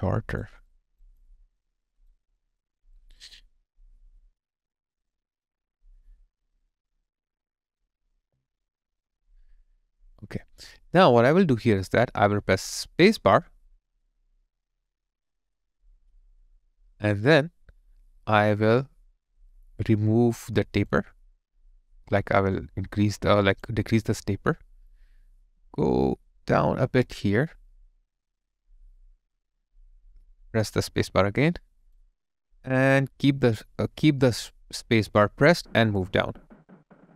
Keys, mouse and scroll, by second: 0.1 alt+right click, 1.2 alt+click, 1.8 alt+right click, 2.3 alt+click, 8.2 alt+click, 8.8 alt+right click, 9.2 alt+middle click, 9.9 alt+click, 10.4 alt+middle click, 31.5 space.